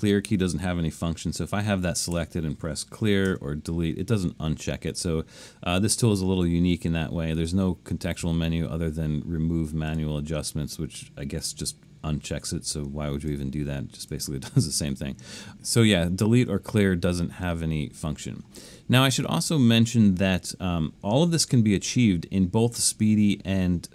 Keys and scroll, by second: 2.2 9, 3.3 BackSpace.